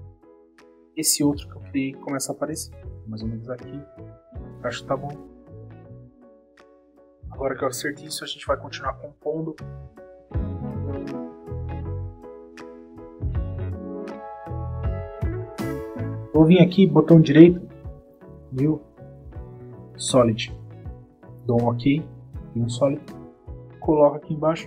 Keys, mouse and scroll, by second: 3.1 click, 3.9 click, 4.3 space, 7.0 click, 7.2 space, 9.5 click, 10.0 space, 10.2 space, 10.2 click, 10.4 Return, 10.5 click, 10.6 space, 10.8 click, 11.0 click, 11.3 click, 12.1 click, 12.4 click, 12.4 space, 12.5 Return, 12.6 double click, 12.8 click, 13.1 double click, 13.3 click, 13.5 click, 13.7 click, 14.2 click, 14.3 Down, 14.4 click, 14.6 click, 14.6 click, 15.0 click, 15.4 click, 15.4 click, 15.7 click, 15.8 space, 17.0 click, 17.9 click, 19.8 click, 21.2 click, 21.6 click, 22.8 click.